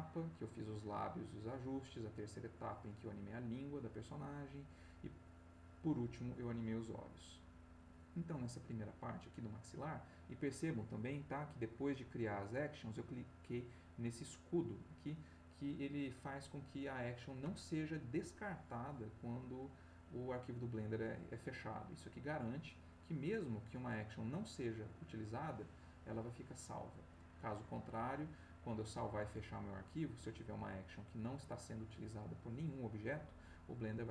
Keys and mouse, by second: 1.5 click, 2.4 click, 4.1 click, 5.1 click, 7.0 click, 7.6 click, 22.9 click.